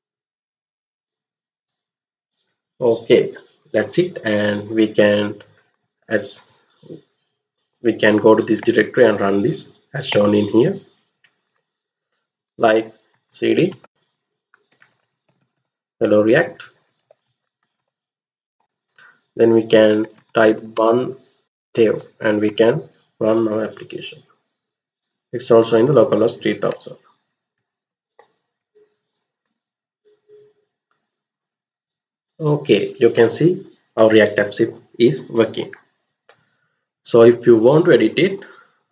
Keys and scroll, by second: 12.8-18.2 typing, 18.5 Return, 19.7-22.0 typing, 22.5 Return, 26.7 alt+Tab, 27.5 alt+Tab.